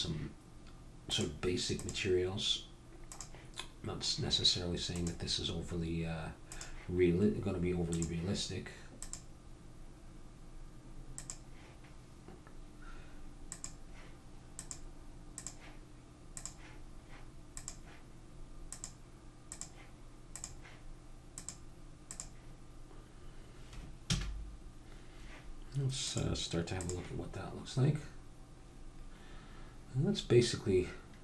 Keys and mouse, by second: 5.0-6.1 drag, 6.6 click, 7.9-10.8 drag, 13.5-23.3 drag, 24.1 a, 26.0 click, 26.6 click.